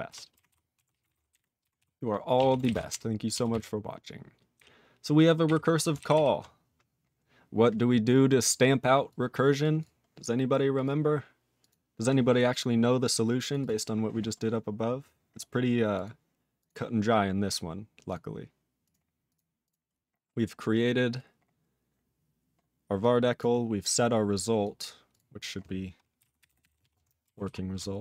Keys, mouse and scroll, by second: 0.1 ctrl+e, 0.5 ctrl+s, 0.7 ctrl+a, 0.9 ctrl+p, 1.0 ctrl+space, 1.0 ctrl+e, 1.1 ctrl+n, 1.3 ctrl+g, 1.3 ctrl+e, 1.8 ctrl+s, 2.4 ctrl+a, 2.6 ctrl+space, 2.6 ctrl+e, 2.7 ctrl+n, 2.9 ctrl+g, 3.5 ctrl+s, 4.5-5.2 ctrl+n, 5.5 ctrl+n, 6.0 alt+b, 6.1 alt+b, 7.2 scroll down 2, 8.0-9.1 scroll down 1, 9.1 click, 9.6 click, 9.8 click, 9.8 click, 10.7 click, 10.8 click, 11.6 click, 11.7 click, 13.1 click, 13.5 click, 13.6 click, 13.6 click, 13.9-14.6 scroll up 6, 14.6 scroll down 12, 15.9 click, 16.0 click, 16.6 click, 18.1 click, 18.1 click, 18.8 click, 18.9 click, 19.2 click, 19.3 click, 19.6 click, 19.7 click, 19.9-20.7 scroll up 6, 21.2-22.4 scroll up 6, 23.0 click, 23.3 click, 24.3 click, 24.6 click, 25.1 click, 25.1 click, 25.3 click, 25.5 click, 27.2 _, 27.5 ctrl+s.